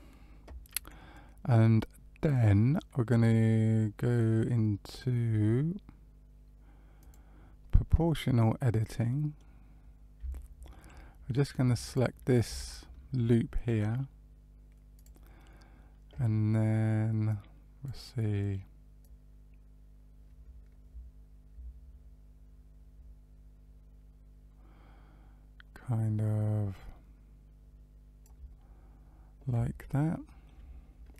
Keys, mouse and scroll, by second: 6.9 click, 9.0 middle click, 9.7-10.1 scroll up 3, 10.3 shift+middle click, 11.8 alt+click, 12.5 alt+click, 14.9 click, 17.2 click, 18.9 click, 28.8-29.5 scroll down 1, 29.7 shift+middle click.